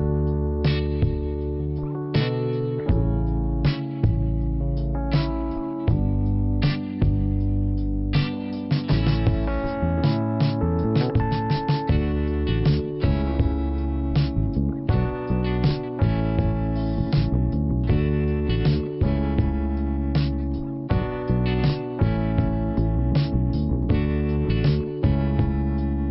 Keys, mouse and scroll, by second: 0.4 click, 4.7 click, 9.5 click, 10.2 click, 11.9 right click, 12.7 click, 13.1 click, 16.3 click, 17.3 click, 20.2 click, 21.9 click, 22.4 click, 23.0 click, 23.5 click, 24.2 click, 25.7 click.